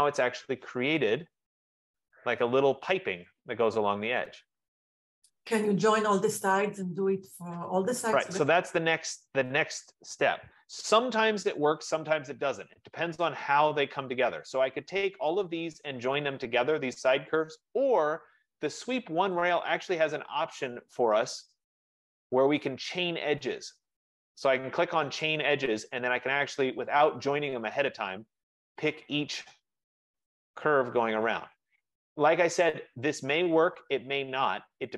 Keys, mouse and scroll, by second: 1.6 click, 2.9 middle click, 3.1 middle click, 7.1 right click, 11.8 ctrl+z, 13.7 middle click, 13.9 middle click, 14.7 click, 16.5 click, 17.9 Escape, 18.2 Escape, 19.7 click, 22.2 click, 25.3 click, 27.0 click, 28.8 click, 29.8-31.7 scroll, 31.9 click, 33.3 click.